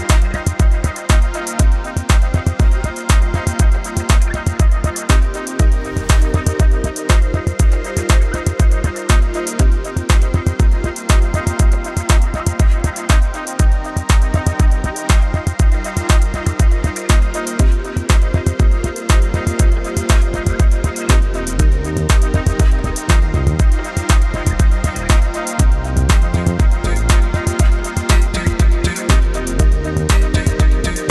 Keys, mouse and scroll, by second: 0.0-4.6 typing, 0.7 click, 1.5 click, 1.8 click, 2.0 click, 2.4 click, 3.2 click, 4.0 click, 4.8 click, 5.6-12.5 typing, 5.7 click, 6.5 click, 7.5 click, 7.9 click, 8.0 click, 9.0 click, 9.2 Escape, 9.4 click, 9.5 click, 10.4 click, 10.9 ctrl+shift+], 11.4 click, 11.6 click, 12.2 ctrl+-, 12.4 click, 12.9 click, 13.6 v, 13.7 click, 14.9 Left, 15.2 click, 16.2 click, 16.3-17.9 typing, 16.4 click, 16.5 click, 16.9 click, 17.5 click, 18.2 click, 18.6 click, 20.2 b, 20.4 click, 23.7 click, 25.4 ctrl+z, 26.0 click, 27.4-28.6 typing, 28.2 click, 29.3 ctrl+alt+click, 29.8 b, 30.8 shift+click.